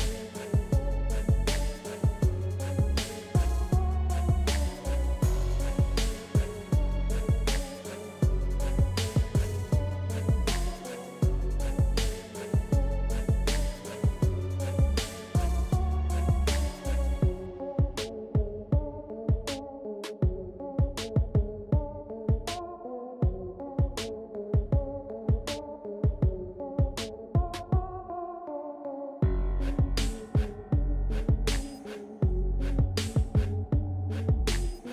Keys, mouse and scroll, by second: 1.2-9.0 drag, 12.1 ctrl+z, 13.7-28.9 drag, 18.4 typing, 28.9-30.4 drag, 30.4 ctrl+z, 31.1-34.9 drag.